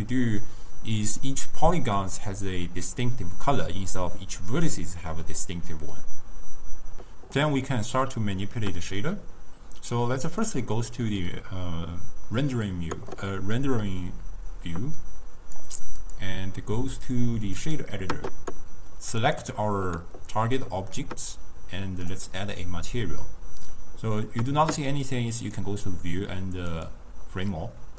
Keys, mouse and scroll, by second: 8.3 scroll up 1, 8.4-10.4 middle drag, 10.4 click, 14.5-19.1 drag, 19.2 click, 22.2-25.2 drag, 25.5-27.6 drag, 27.6 scroll up 1, 27.6-27.9 middle drag.